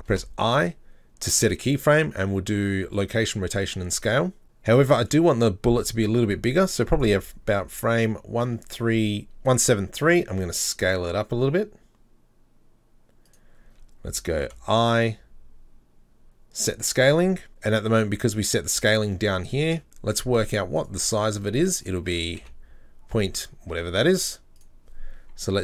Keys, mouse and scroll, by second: 3.6 i, 5.1-10.3 drag, 10.3 s, 16.7 i, 19.7 n, 24.6 click.